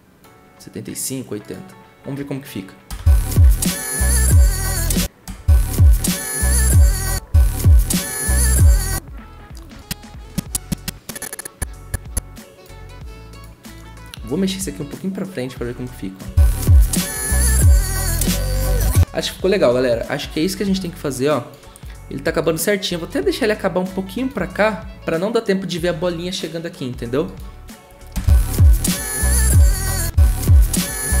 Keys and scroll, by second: 2.9 0, 4.7 0, 5.2 0, 30.0 0.